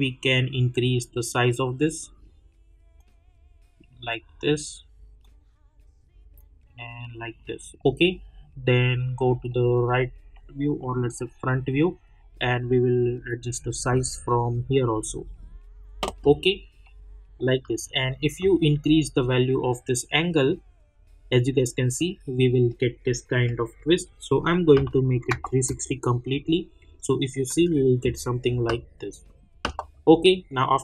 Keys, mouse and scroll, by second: 7.7 middle click, 11.3 scroll down 1, 13.0-16.8 drag, 16.8 middle click, 18.8-23.4 drag, 25.7 Return, 27.5 ctrl+r, 29.2 click.